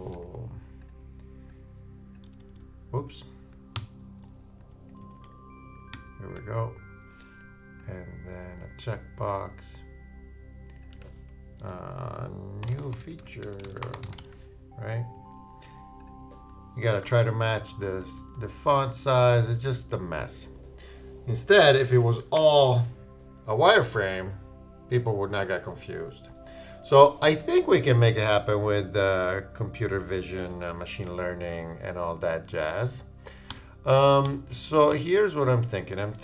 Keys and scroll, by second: 0.0-0.9 typing, 2.2 super+=, 3.7 super+0, 4.6 super+], 11.6 shift+Return, 13.9-14.7 typing, 17.0 super+].